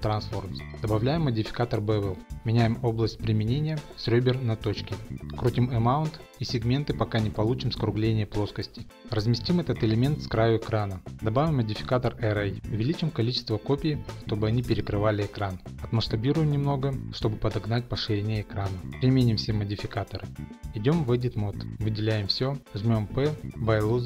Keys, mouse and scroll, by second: 0.1 click, 1.8 click, 2.2 click, 2.7 click, 4.0 click, 5.0 click, 5.8 typing, 6.0 Return, 6.4-8.5 scroll, 6.6 shift+middle click, 7.1 middle click, 7.6 middle click, 8.1 middle click, 10.2 g, 10.9 click, 11.5 click, 11.8 click, 12.3 click, 19.5 click, 21.3 click, 21.6 click.